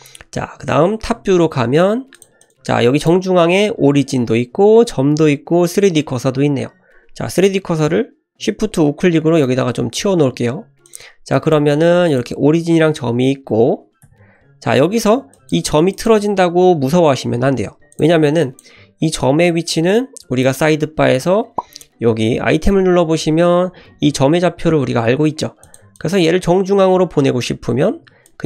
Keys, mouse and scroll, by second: 1.8-2.2 scroll down 2, 2.2 click, 2.4 click, 2.5 click, 9.4 shift+right click, 10.9 click, 11.4 click, 11.8 g, 13.4 ctrl+z, 14.1 n, 15.3 click, 15.7 g, 17.9 click, 18.4 click, 20.4 click, 25.6 click, 26.0 click, 28.3-28.4 drag.